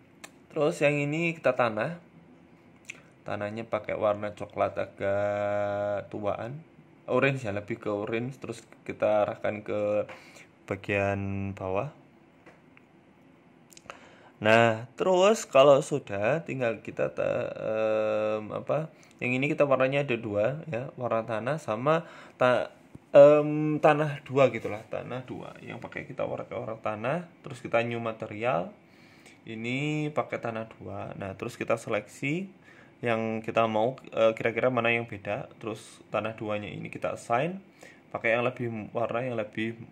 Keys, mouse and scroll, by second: 1.8 click, 5.2 middle click, 5.9 click, 12.3 shift+middle click, 13.0 scroll up 2, 13.2 shift+middle click, 13.7 right click, 14.5 click, 17.6 scroll up 2, 17.8 shift+middle click, 19.0-19.5 scroll up 1, 19.5 shift+middle click, 19.5 scroll up 1, 21.7 click, 22.1 click, 23.3 ctrl+z, 23.5 ctrl+z, 23.9 click, 27.5 click, 27.9 click, 28.7 BackSpace, 28.9 BackSpace, 30.1 Tab, 31.2 click, 31.7 right click, 32.2 shift+right click, 34.9 click, 36.4 click.